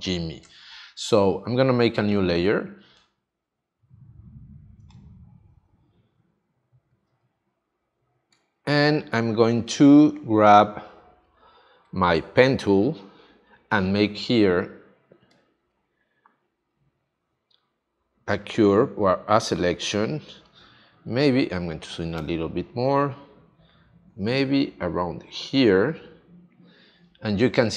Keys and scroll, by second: 4.7 space, 8.4 space, 9.8 space.